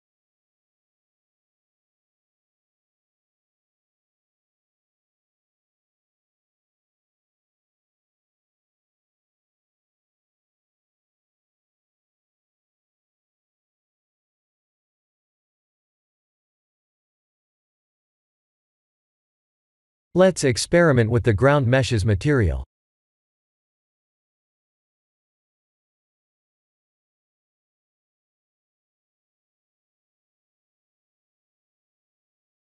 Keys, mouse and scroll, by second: 1.3 shift+d, 5.3 shift+d, 7.9 middle click, 8.0 middle click, 9.4 middle click, 9.6 shift+z, 10.0 middle click, 12.2 middle click, 12.6 shift+z, 13.4 middle click, 14.4 middle click, 14.9 KP_0, 17.3 click, 22.6 click, 23.5 click, 30.9 click, 32.5 click.